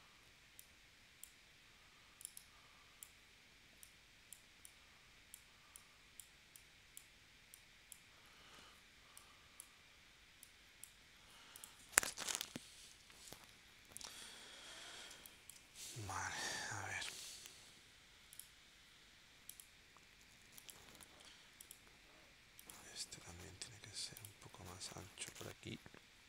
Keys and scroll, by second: 13.1 super+s, 15.1 space, 23.7 v, 25.5 shift+w.